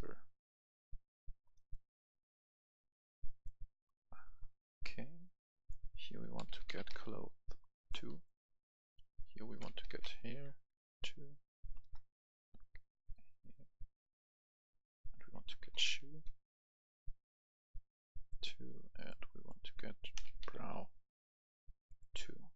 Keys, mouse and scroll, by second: 1.5 right click, 2.2 click, 3.7 right click, 5.6 click, 6.3-6.8 typing, 7.8 click, 8.1 right click, 9.0 click, 9.8-10.4 typing, 11.8 BackSpace, 12.9 click, 15.2-16.0 typing, 18.2 click, 20.4 typing.